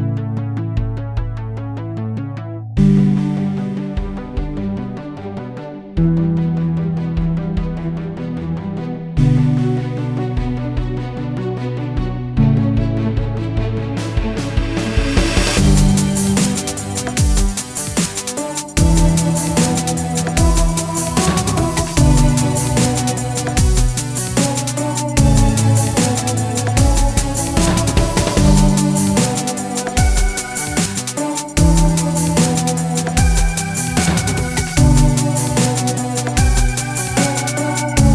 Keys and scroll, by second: 11.2-14.5 typing, 15.1 Return, 18.6-19.9 typing, 21.0 typing.